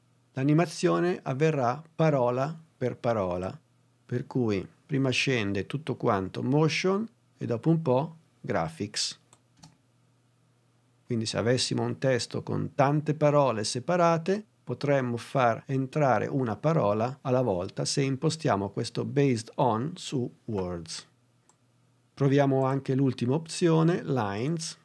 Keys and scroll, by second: 9.5 space.